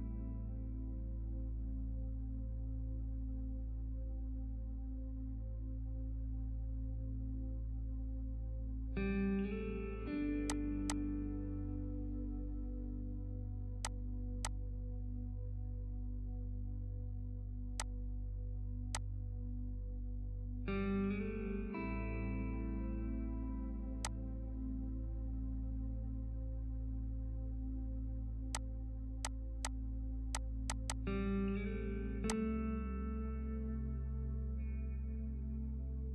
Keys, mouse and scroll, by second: 10.5 click, 10.7 F2, 10.9-14.6 drag, 14.6 p, 15.6 shift+F2, 17.8-23.2 drag, 24.0 click, 27.6 ctrl+space, 28.5 click.